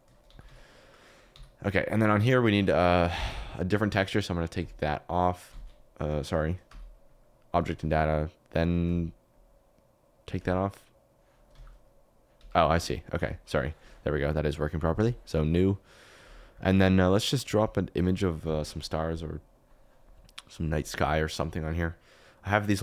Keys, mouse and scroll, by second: 0.2 g, 1.2 u, 1.3 y, 2.5 click, 5.5 ctrl+z, 6.6 q, 8.9 click, 11.5 g, 12.3 Escape, 13.1 s, 14.9 click, 15.4 click, 16.2 click, 16.7 click.